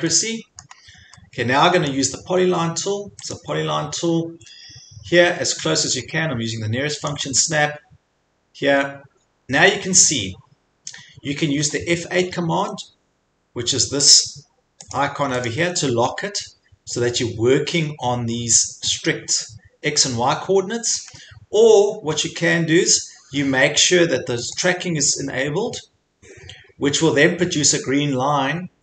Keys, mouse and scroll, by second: 0.6-1.2 scroll, 1.9 scroll, 3.4 click, 5.0 middle click, 5.1 middle click, 5.2 middle click, 5.6 scroll, 6.1 scroll, 7.2 click, 7.3-7.7 scroll, 8.7-9.1 scroll, 12.3 F8, 15.0 click, 15.5 click, 21.1 F8, 24.6-28.8 drag.